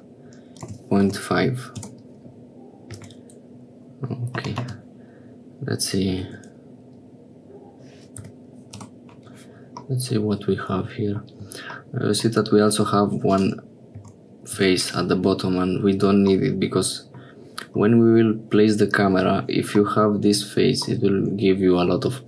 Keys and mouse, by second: 3.1 Tab, 4.4 g, 9.9-11.4 middle drag, 13.3 click, 14.9 click, 16.5 middle click, 20.0 middle click, 21.0 middle click.